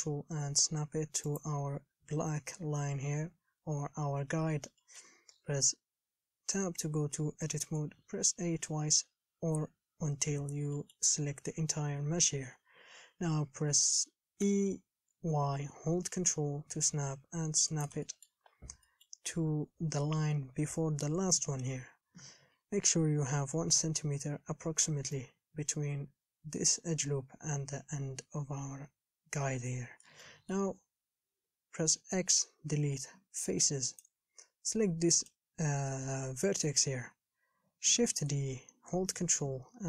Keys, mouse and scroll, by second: 4.0 scroll up 3, 5.1 shift+middle click, 5.5 Tab, 8.2 a, 8.7 a, 11.0 middle click, 11.4-12.7 scroll down 1, 12.7 KP_7, 14.7 e, 18.3 shift+middle click, 18.7-19.1 scroll up 5, 19.1-31.1 shift+middle drag, 31.1 scroll up 2, 34.2 x, 35.5 click, 38.2 shift+d.